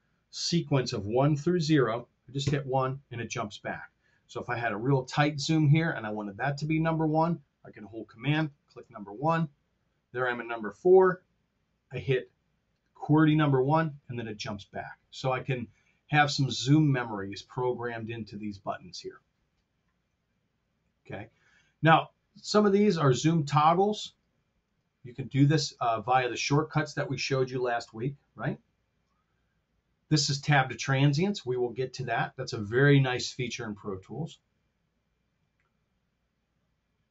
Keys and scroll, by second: 2.4 1, 4.3 r, 13.2 1.